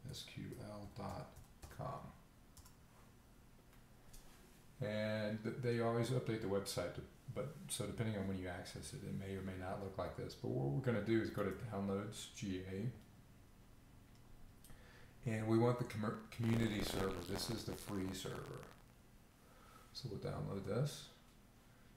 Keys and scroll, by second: 0.0-1.5 typing.